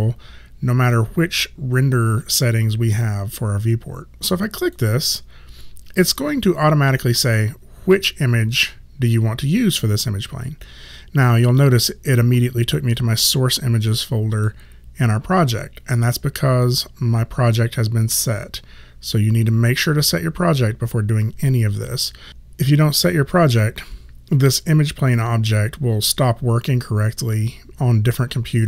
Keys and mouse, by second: 4.6 click, 13.0 click.